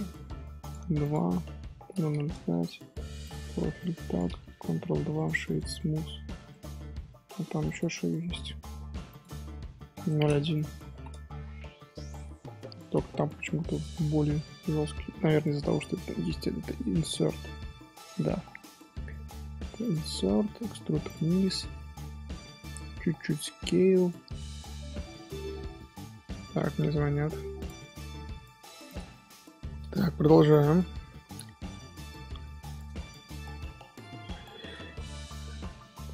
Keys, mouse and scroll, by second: 1.9 KP_0, 3.2-4.7 drag, 4.7 ctrl+2, 5.7-7.6 middle drag, 7.6 click, 9.0 click, 10.5-11.6 drag, 11.6 middle click, 12.0-12.4 scroll up 2, 12.4 Tab, 12.8 middle click, 13.4 3, 13.7 click, 14.2 middle click, 14.5-14.9 scroll up 1, 14.9-16.8 middle drag, 16.8-17.4 scroll up 1, 17.4 i, 21.2-23.3 middle drag, 23.3 s, 25.5-26.4 scroll down 1, 26.4-28.6 scroll down 1, 29.5-29.8 scroll up 2, 29.8 middle click, 30.6 scroll up 2, 31.2 scroll down 2, 31.7 ctrl+z, 33.2 ctrl+shift+z, 33.9 2, 35.2 shift+h, 35.6 Tab, 36.0-36.1 scroll up 1.